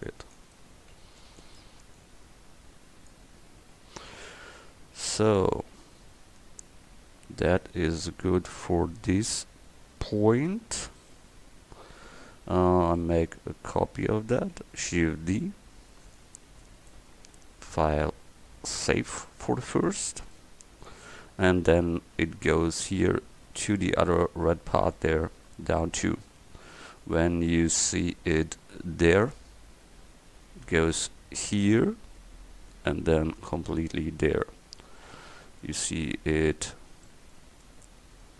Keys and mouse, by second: 1.1 c, 3.6 Tab, 4.0 middle click, 10.4-12.5 middle drag, 12.6 middle click, 15.0 shift+d, 25.9-27.1 middle drag, 35.0 middle click, 35.2 middle click.